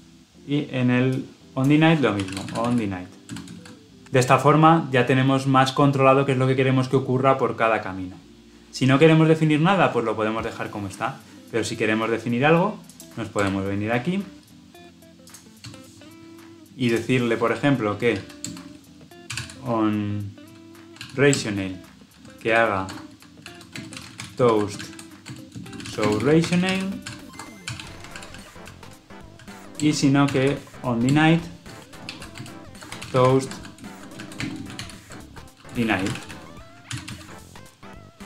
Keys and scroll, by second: 4.0 ctrl+alt+l, 4.0 ctrl+alt+o, 21.2 Return, 36.8 ctrl+alt+l, 36.9 ctrl+alt+o.